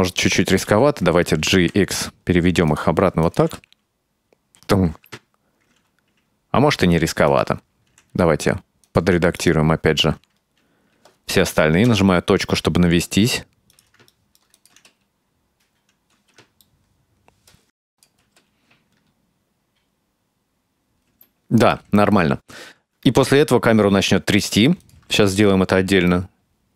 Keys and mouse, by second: 1.6 g, 3.3 click, 3.5 space, 5.0 space, 7.3 right click, 7.9 r, 9.4 right click, 11.9 KP_Decimal, 12.6 right drag, 12.7 middle click, 12.8 r, 13.4 right click, 13.7 r, 14.6 click, 14.8 space, 16.2 space, 16.7 middle click, 18.0 click, 18.3 space, 21.1 space, 24.9 click, 25.0 space.